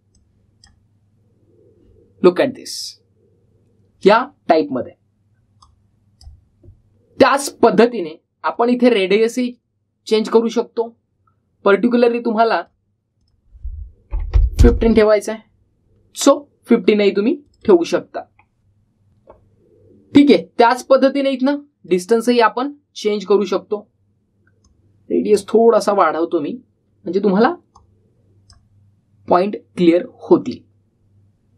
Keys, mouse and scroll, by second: 6.5-7.1 drag, 8.9-9.6 typing, 9.4-10.3 drag, 12.8-13.5 click, 18.3 click, 21.6-22.9 drag, 25.5-26.4 drag.